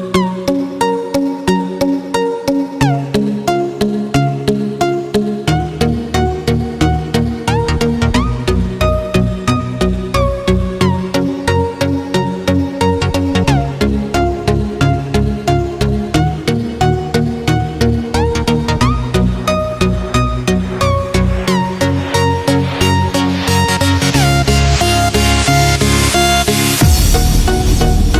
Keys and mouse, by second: 0.0-1.0 middle drag, 2.1-4.2 middle drag, 5.2 g, 8.4-9.1 middle drag, 10.1 g, 16.7-18.3 middle drag, 19.2-20.0 middle drag, 20.9-24.4 middle drag, 26.7 r.